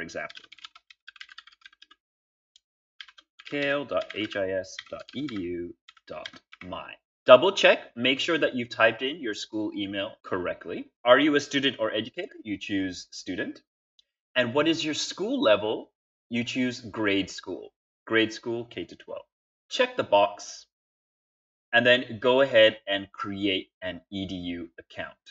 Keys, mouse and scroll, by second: 0.0-6.9 typing.